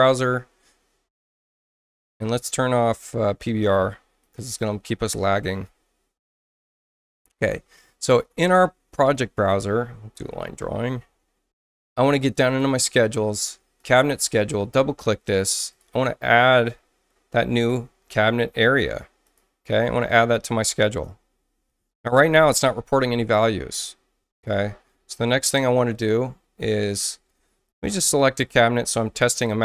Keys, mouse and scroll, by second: 4.2 click, 9.0 click, 10.1 click, 10.6 Return, 12.5 click, 13.8 click, 14.0 click, 15.7 click, 15.9 click, 17.2 scroll down 2, 19.2 click, 20.0 click, 20.9 click, 21.5 scroll down 1, 21.8 middle click, 22.1 middle click, 25.7 click, 27.2 space, 27.7 click, 29.3 click.